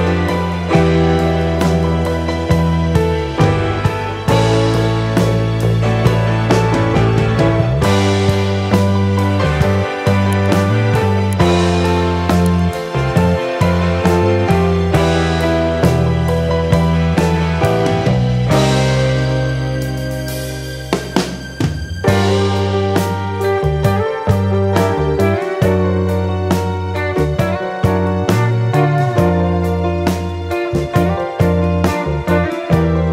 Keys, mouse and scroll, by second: 2.1 shift+d, 2.3 shift+Down, 5.3 click, 7.8-9.5 shift+Down, 11.7 shift+Down, 11.9 shift+Down, 13.1 shift+Up, 13.3 shift+Up, 14.2 click, 14.6-15.1 scroll down 1, 15.1-15.7 scroll up 1, 15.8 click, 16.5 ctrl+o, 17.6 scroll down 1, 19.3-19.9 scroll down 1, 20.2 scroll down 1, 21.9 click, 23.3 click, 31.6 F9.